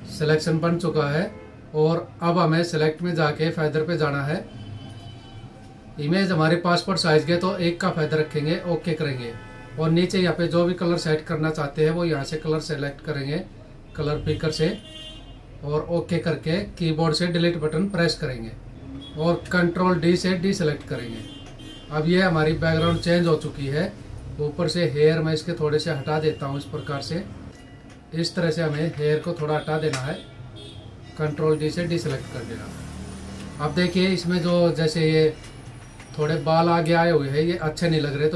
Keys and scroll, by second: 0.0 ctrl+-, 18.5 Delete, 20.2 ctrl+d, 28.1 alt+s, 28.3 alt+f, 29.3 Delete, 31.4 ctrl+d, 33.5 ctrl+=, 34.2 space, 35.3 ctrl+=.